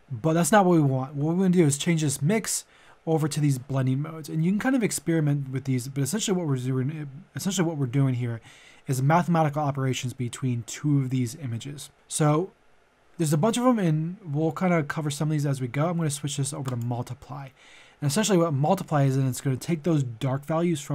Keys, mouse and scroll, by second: 1.5-20.9 drag.